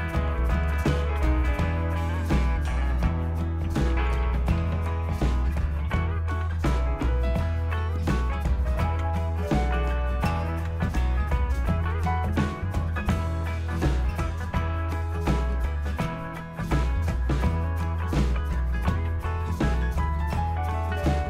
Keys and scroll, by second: 1.2 Return, 3.0-6.6 typing, 9.0 Return, 10.7 Return, 11.8 Down, 12.0 Down, 13.1 Return, 14.3 Down, 14.6 Down, 15.0 Down, 16.0 Return, 18.6-20.1 typing.